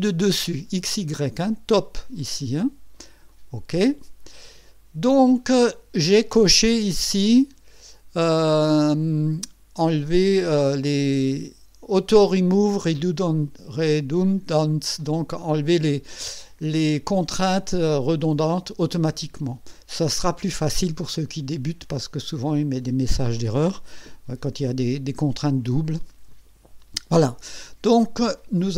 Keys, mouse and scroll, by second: 0.5 click, 3.3 click.